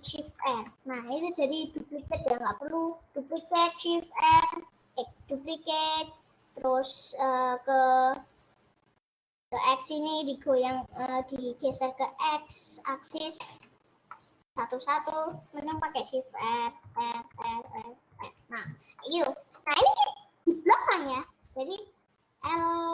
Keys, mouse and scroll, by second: 0.4 shift+r, 12.8-16.4 middle drag, 16.4-18.1 typing, 19.1-22.5 middle drag.